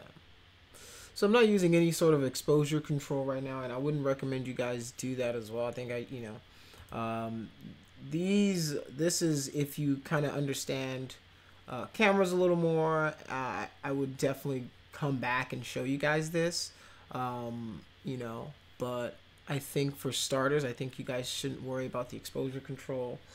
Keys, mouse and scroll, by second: 6.7 click.